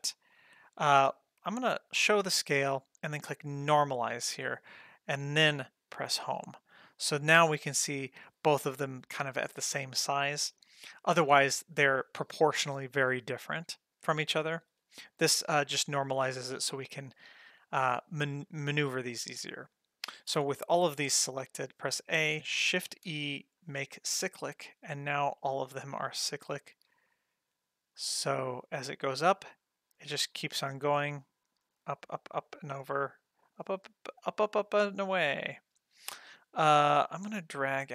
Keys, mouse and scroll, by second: 2.0 click, 3.5 click, 6.0 Home, 7.4-8.0 ctrl+middle drag, 14.4 middle click, 15.1 ctrl+middle click, 15.8 ctrl+middle click, 17.0 click, 20.3 a, 22.9 shift+e, 25.9-32.7 drag, 37.7-37.9 drag.